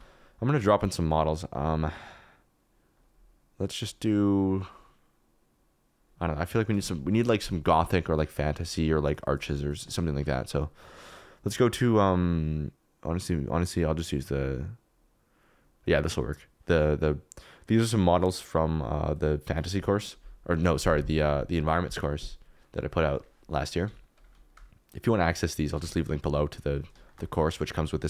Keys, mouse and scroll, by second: 0.9 click, 2.9 typing, 23.8 s, 25.7 s, 26.2 click, 26.6 middle click, 27.0 shift+middle click, 27.4 KP_Decimal, 27.5 middle click.